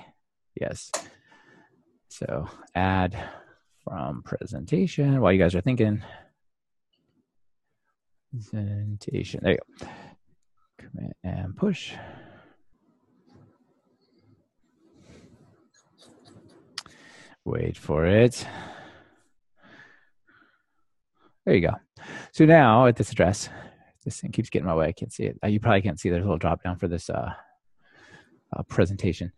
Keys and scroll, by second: 0.0 super+k.